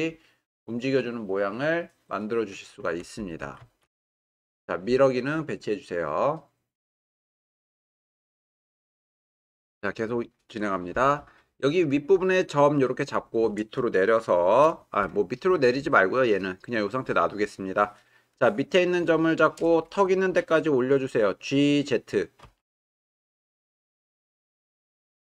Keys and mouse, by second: 0.5 click, 3.6 ctrl+z, 12.4 click, 18.5-18.9 drag, 22.4 g, 22.6 z.